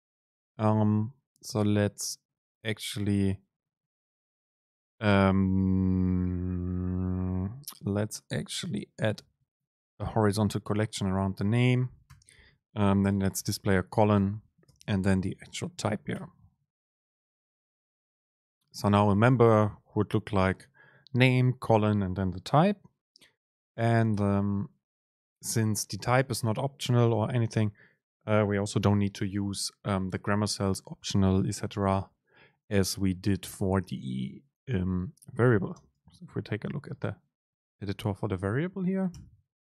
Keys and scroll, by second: 11.5 Right, 12.2 Right, 14.7 Return, 14.8 super+space, 24.3 ctrl+shift+super+F9, 35.9 super+n.